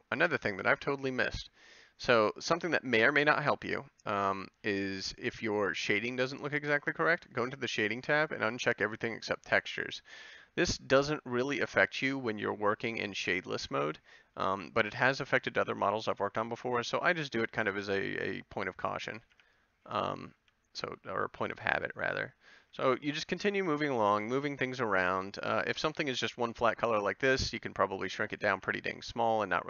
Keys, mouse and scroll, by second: 15.7 Tab, 19.3 b, 20.4 g, 21.7 a, 22.7 b, 24.0 g, 25.7 a, 27.4 g, 27.6 click, 28.5 b.